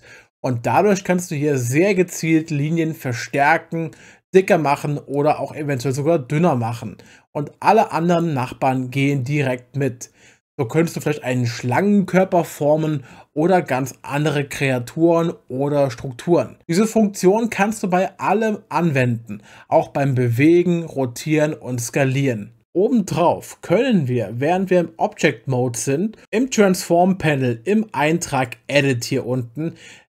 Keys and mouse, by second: 4.4 click, 5.1 click, 24.5 Tab, 28.4 click.